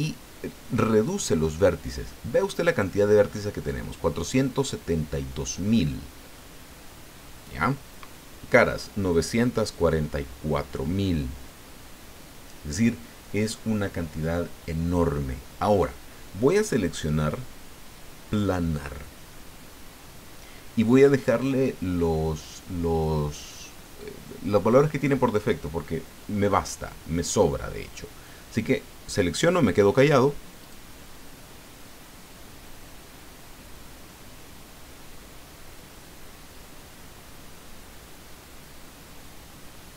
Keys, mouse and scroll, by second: 30.6 click.